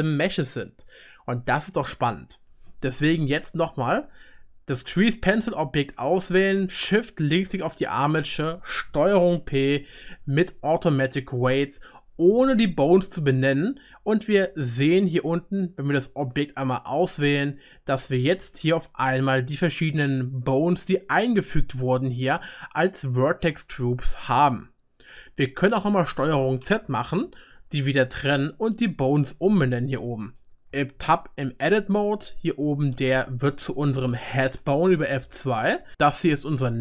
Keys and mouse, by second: 4.9-7.4 right drag, 7.4 shift+click, 9.0 ctrl+p, 9.0 ctrl+right click, 16.3 click, 16.5-21.2 right drag, 21.5 right click, 21.7-24.9 right drag, 26.6 ctrl+z, 27.1 ctrl+z, 28.8 click, 30.7 Tab, 31.7 click, 32.1 click, 32.6 F2, 35.6 click, 35.9 F2, 36.2 right click, 36.3 F2.